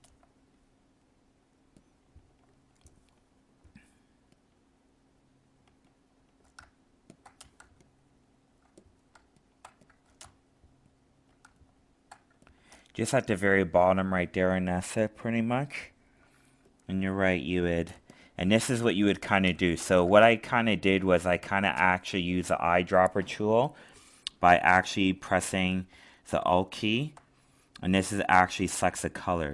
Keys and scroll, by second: 7.6 alt+space, 20.1 alt+space.